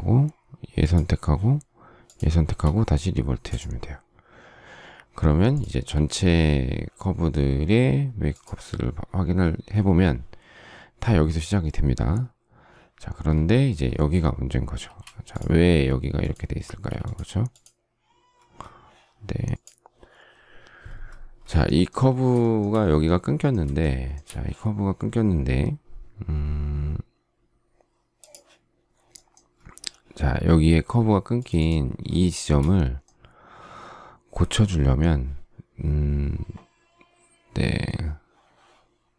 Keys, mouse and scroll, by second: 0.6 shift+click, 1.8 shift+click, 5.7 ctrl+a, 14.6 space, 16.5 space, 22.4 shift+middle click, 23.8 shift+scroll, 23.8 shift+middle click, 32.3 shift+middle click.